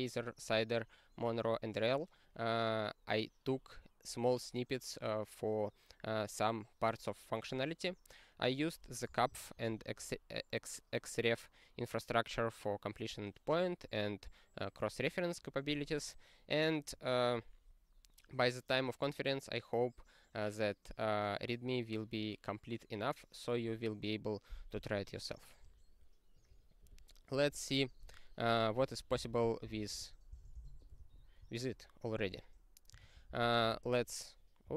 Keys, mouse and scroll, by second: 26.8 n, 28.8 ctrl+a, 29.1 ctrl+space, 29.6 ctrl+w, 30.3 Return, 33.0 ctrl+p, 33.6 ctrl+z, 34.6 super+o.